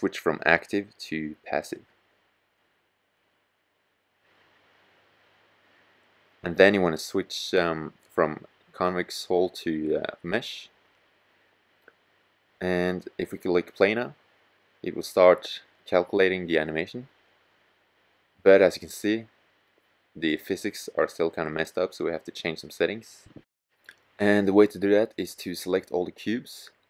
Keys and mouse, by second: 14.9 click, 18.8-22.2 drag, 23.1 middle click, 24.5-25.4 middle drag.